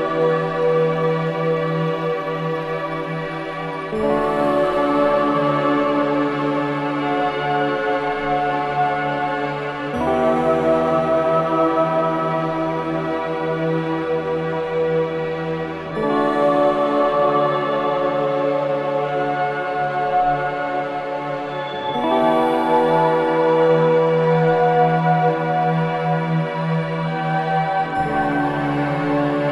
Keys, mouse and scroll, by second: 0.5 space, 0.7 click, 2.8 space, 2.8 click, 3.4-5.8 alt+drag, 6.9 space, 7.0 click, 7.4 space, 9.0 click, 11.4 space, 11.5 click, 11.9 space, 12.3-13.9 drag, 13.9 4, 14.3-14.9 scroll up 1, 14.9-15.7 scroll down 1, 15.7-16.6 scroll up 1, 16.6-18.1 drag, 18.1-24.2 ctrl+drag, 24.2 ctrl+Delete, 26.1 alt+click, 27.0 ctrl+z, 29.1 alt+click.